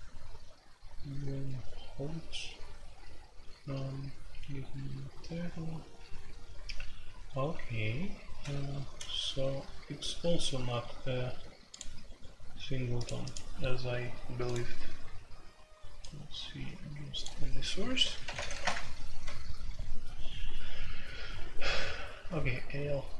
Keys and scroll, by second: 18.0-18.5 typing, 18.6 Return.